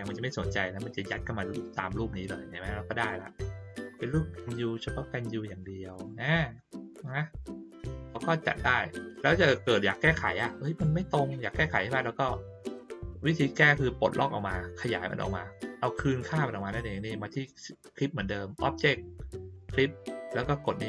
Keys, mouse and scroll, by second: 1.6-3.0 drag, 3.4-3.8 middle drag, 4.1 ctrl+scroll down 1, 5.0-5.6 drag, 5.9 click, 8.1 click, 10.4 click, 15.9 click.